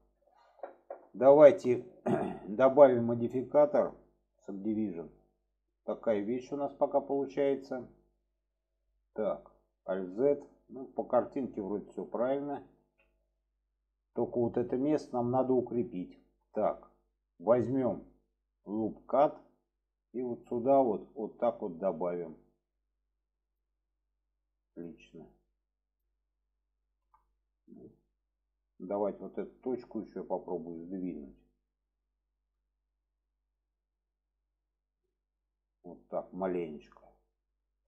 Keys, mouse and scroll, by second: 0.0-0.5 middle drag, 1.0-1.4 middle drag, 1.8 middle click, 3.1-4.7 drag, 5.1-6.1 middle drag, 7.3 shift+middle click, 9.9 alt+z, 12.7 alt+z, 13.2-13.7 middle drag, 15.3 alt+middle click, 16.4 shift+middle drag, 18.7 click, 20.0-23.6 drag, 24.7 click, 25.1 click, 25.9 click, 26.8 shift+middle click, 27.8-28.4 middle drag, 29.1 click, 29.5-32.4 middle drag, 34.7 click, 36.4 click, 37.0-37.8 middle drag.